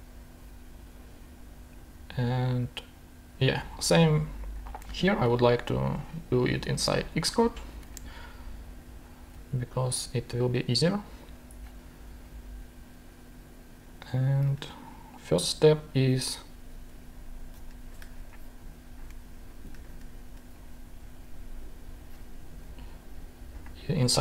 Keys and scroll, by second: 4.5 shift+super+Tab, 7.8 shift+super+r, 8.9 shift+super+Down, 14.4 shift+super+Tab, 17.8 shift+super+Tab, 19.1 ctrl+shift+2, 19.9 ctrl+shift+super+Tab.